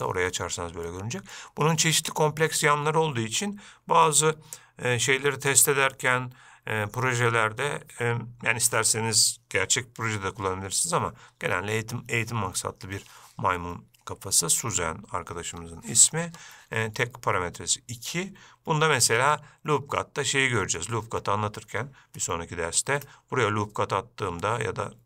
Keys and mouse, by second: 0.0 middle drag, 1.1-1.6 middle drag, 2.4-2.7 middle drag, 19.1 Tab, 19.5-21.1 middle drag, 23.1 ctrl+r.